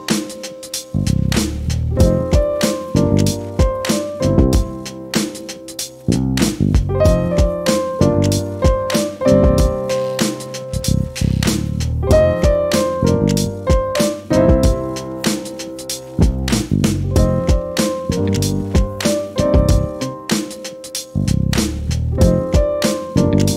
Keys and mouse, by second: 1.3 F12, 4.2 =, 5.3 space, 5.3 click, 5.9 click, 6.2 -, 7.0 space, 7.1 click, 9.5 click, 13.1 click, 13.5 click, 15.4 click, 16.9 F11, 18.6 click, 19.6 click, 21.1 F12, 23.3 click.